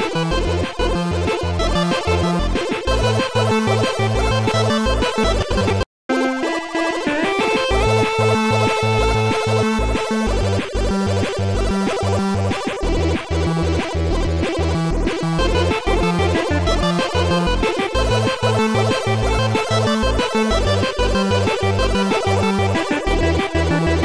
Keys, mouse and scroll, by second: 0.6 shift+click, 2.1 shift+click, 4.6 click, 5.7 shift+click, 8.1 shift+click, 11.7 shift+click, 14.0 click, 14.0 click, 15.0 Delete, 17.4 Delete, 17.4 click, 19.5 click, 20.8 Delete, 20.8 click, 23.8 click.